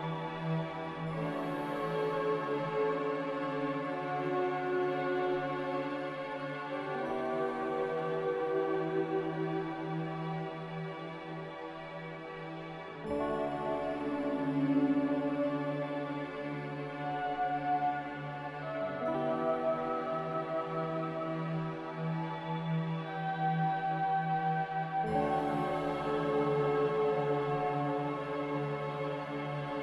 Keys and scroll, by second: 0.4 ctrl+v, 1.5 ctrl+c, 1.5 a, 5.2 n, 11.2 m, 20.0 a, 26.7 ctrl+z.